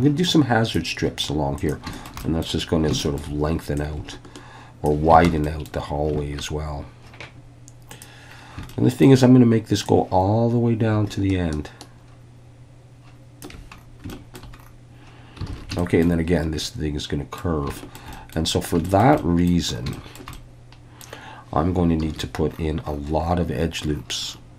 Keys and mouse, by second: 1.6 click, 1.9 shift+middle click, 2.2 middle click, 3.0 shift+middle click, 3.8-4.9 ctrl+drag, 5.2 alt+a, 5.4 middle click, 8.0 click, 8.7 shift+middle click, 9.9-13.4 drag, 14.1 shift+middle click, 15.5 alt+a, 15.8 shift+middle click, 16.6 middle click, 17.8 shift+middle click, 18.1 middle click, 18.8 shift+middle click, 19.2 middle click, 19.9 shift+middle click, 20.3 middle click, 22.0 ctrl+r.